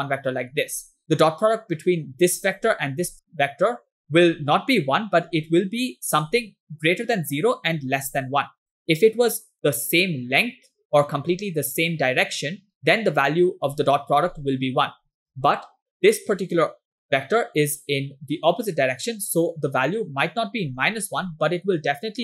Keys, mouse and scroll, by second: 0.0 click, 2.3 click, 3.1 click, 4.0 click, 4.3 click, 5.4 click, 7.4 click, 9.7-10.9 drag, 11.8 click, 12.4 click, 13.6 click, 14.1 click, 16.3 click, 17.7 click, 17.8 click, 19.4 click, 20.8 click, 21.0 click, 21.6 click.